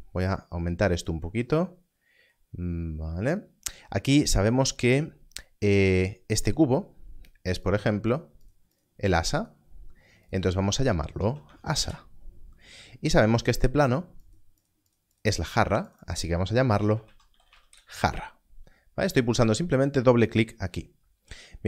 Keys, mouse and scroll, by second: 3.1-3.5 ctrl+scroll up 1, 7.6 click, 11.5 s, 11.8 Return, 14.2 click, 17.0 a, 17.3 r, 17.4 r, 17.7 Return.